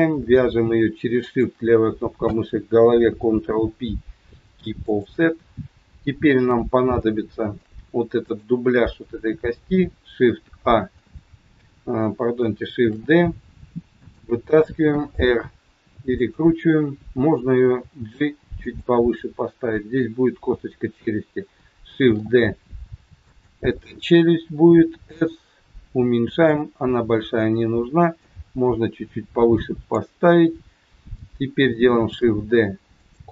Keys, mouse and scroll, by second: 0.3-0.7 scroll down 1, 1.3 shift+click, 3.0 ctrl+p, 6.9 shift+middle click, 8.1 click, 10.6 ctrl+a, 12.8 shift+d, 14.9 r, 17.8 g, 22.1 shift+d, 24.7 s, 28.1 click, 32.0 shift+d.